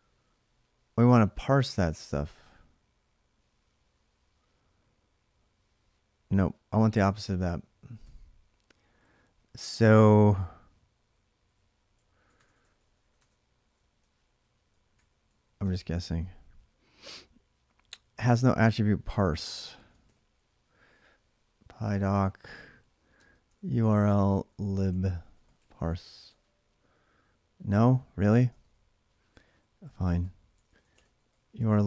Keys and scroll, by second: 7.8 Up, 8.8-9.6 Left, 9.9 Left, 9.9 Right, 10.1-11.3 Right, 11.3 Left, 11.7-15.2 typing, 15.4 Return, 19.5 ctrl+a, 19.6-25.6 typing, 26.0 Return, 28.3 shift+/.